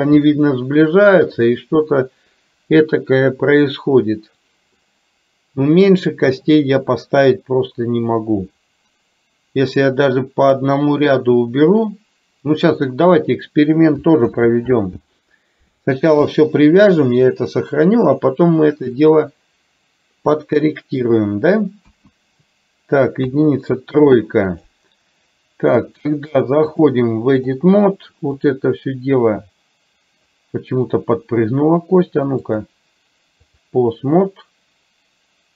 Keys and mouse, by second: 4.9-6.0 middle drag, 14.4 ctrl+z, 16.3 KP_3, 19.2-21.3 middle drag, 21.9 KP_1, 23.4 KP_3, 24.7 click, 26.9 click, 28.7-30.4 drag, 32.5-33.9 drag.